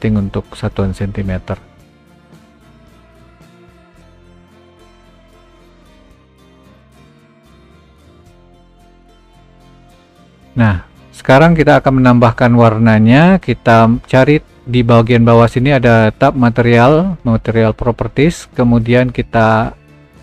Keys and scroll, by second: 2.1 g.